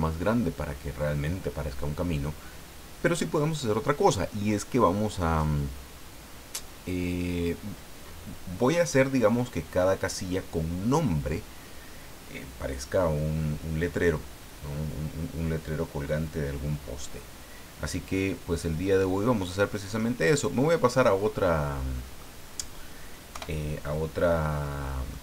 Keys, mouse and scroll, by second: 20.3 click, 21.4 middle click, 23.3 KP_1, 24.2 scroll up 2, 24.5 middle click.